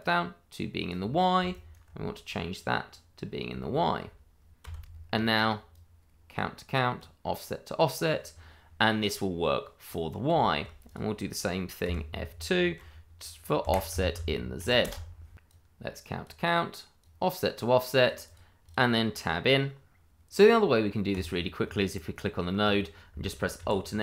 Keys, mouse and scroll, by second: 0.0 click, 1.5 ctrl+right click, 2.2 click, 3.2-3.6 scroll down 1, 3.6 shift+middle click, 4.6 Tab, 5.7 click, 10.4 shift+middle click, 11.8 F2, 13.6 Right, 13.9 BackSpace, 14.6 shift+z, 14.8 Return, 15.4 click, 18.7 double click, 21.1 click, 23.5 alt+s.